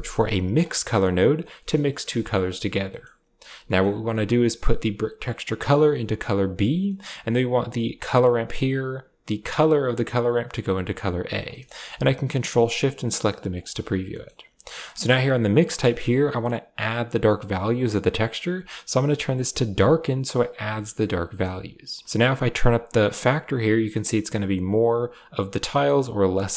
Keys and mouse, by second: 5.3-6.6 drag, 6.7 middle click, 8.4 click, 10.1-11.2 drag, 11.3 middle click, 13.4 ctrl+shift+click, 14.4 click, 15.4-19.7 drag, 21.1 click, 22.3 click, 22.9-24.7 drag, 25.4-26.5 drag.